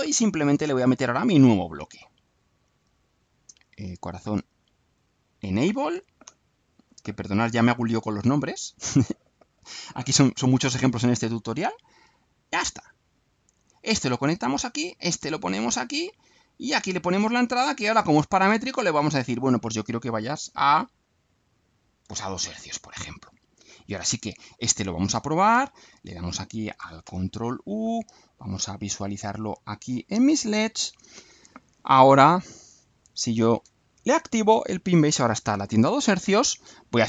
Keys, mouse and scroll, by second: 1.4 click, 5.2 click, 6.2-6.9 alt+drag, 7.5-8.2 alt+drag, 8.7 click, 10.8 click, 11.8-12.8 drag, 13.1-13.9 drag, 14.6-16.0 drag, 16.6 click, 18.0 click, 19.2 click, 22.0 2, 24.2 click, 25.5 ctrl+u, 27.8 click, 28.8 right click, 29.9 scroll down 1, 30.2 right click.